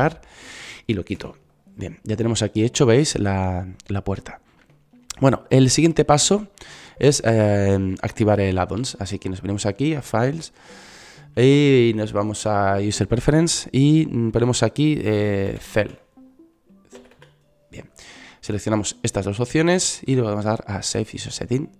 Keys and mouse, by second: 1.4 Delete, 10.1 middle click.